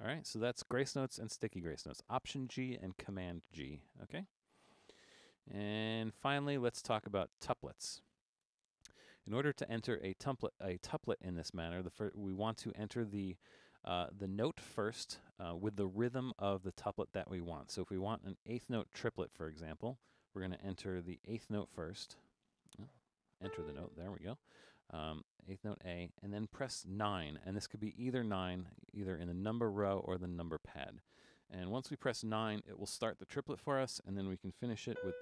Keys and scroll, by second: 5.1-6.6 typing, 8.5 4, 12.6 Down, 12.7 Down, 13.6 Down, 21.8 typing, 23.4 typing, 28.8 9, 35.0-35.2 typing.